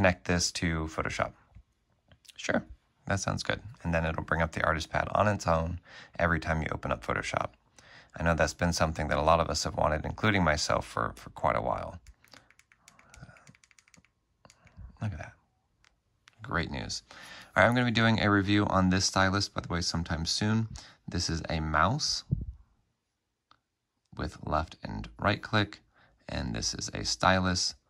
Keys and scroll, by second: 9.7 space.